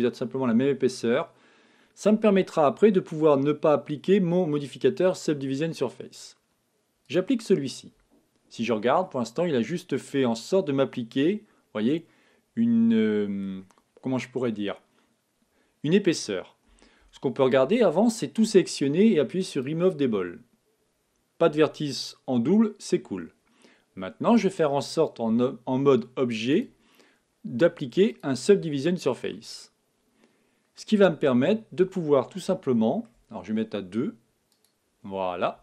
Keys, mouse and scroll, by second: 0.0 click, 0.2-2.0 middle drag, 2.5-2.9 scroll up 1, 2.9-4.8 middle drag, 7.0-8.7 drag, 8.6 Tab, 9.0-10.9 middle drag, 16.6 a, 17.0 a, 19.6-21.5 drag, 25.2 Tab, 26.5-28.4 drag, 29.3-31.2 middle drag, 31.2-32.5 scroll up 1, 32.5-34.5 middle drag, 34.5-35.6 drag.